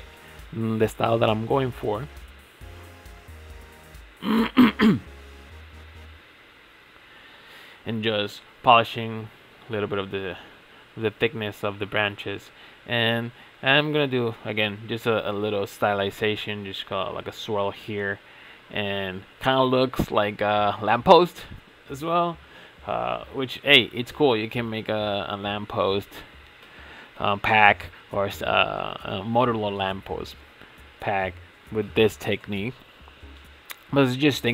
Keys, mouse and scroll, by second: 0.9 shift+middle click, 1.8-2.2 scroll down 2, 2.2 shift+middle click, 2.6 click, 3.7-4.1 shift+middle drag, 4.1 shift+click, 4.5 ctrl+a, 5.7 shift+middle click, 6.5 click, 7.0 ctrl+a, 8.0 click, 8.3 ctrl+a, 10.3 g, 11.2 e, 12.0 e, 13.3 e, 14.6 e, 15.7 e, 16.4 e, 17.2 e, 17.9-18.2 scroll up 4, 18.2-19.9 shift+middle drag, 19.9 click, 20.6 ctrl+a, 22.3 click, 22.5 ctrl+a, 24.9 click, 25.2 ctrl+a, 26.4 click, 26.6 ctrl+a, 28.7 shift+middle click, 29.0 scroll down 3, 29.3-29.8 shift+middle drag, 29.8 click, 30.4 ctrl+a, 32.3 click, 32.6 ctrl+a, 34.3-34.5 scroll down 4.